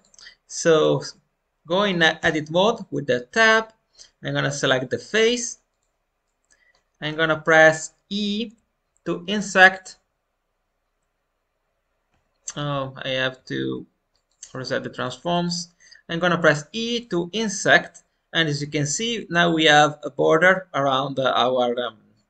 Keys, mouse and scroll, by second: 0.7 click, 1.0-2.1 middle drag, 2.1 Tab, 4.5-6.2 drag, 6.2 middle click, 6.9 scroll up 2, 7.4 shift+middle click, 13.5 ctrl+a, 14.9 click, 15.2 Tab, 16.3 i.